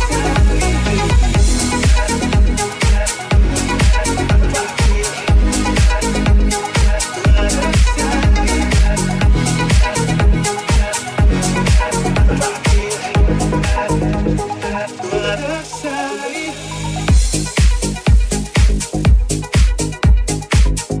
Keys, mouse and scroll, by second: 0.1 shift+click, 0.1 shift+middle click, 0.3 shift+click, 0.3-4.9 shift+middle drag, 0.8 i, 1.4 w, 2.1 s, 3.2 1, 3.5 right click, 3.9 shift+right click, 4.4 j, 4.9 right click, 4.9 shift+middle click, 5.4 shift+click, 5.5-6.8 shift+middle drag, 5.7 j, 6.3 3, 6.8 right click, 6.8 middle click, 7.4 right click, 7.5 shift+middle click, 7.8 shift+right click, 7.9 shift+middle click, 8.2 shift+right click, 8.2 shift+middle click, 8.4 shift+right click, 8.5 shift+middle click, 8.6 shift+right click, 8.6 shift+middle click, 8.8 shift+right click, 8.8 shift+middle click, 9.0 shift+right click, 9.0 shift+middle click, 9.2 shift+right click, 9.3 shift+middle click, 9.6 shift+right click, 9.6 shift+middle click, 9.8 shift+right click, 9.8-12.1 shift+middle drag, 12.1 shift+right click, 12.2 shift+middle click, 12.6 shift+right click, 12.7-21.0 ctrl+shift+middle drag, 13.9 alt+e, 17.4 i.